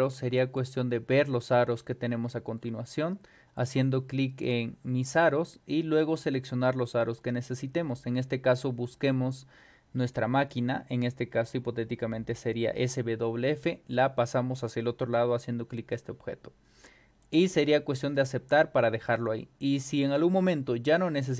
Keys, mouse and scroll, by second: 0.6 click, 4.4 click, 5.1 click, 6.2-10.5 drag, 12.4 click, 15.8 click, 17.2 click, 19.0 middle click, 19.0 scroll down 2, 20.4 scroll up 2, 20.8 scroll down 2.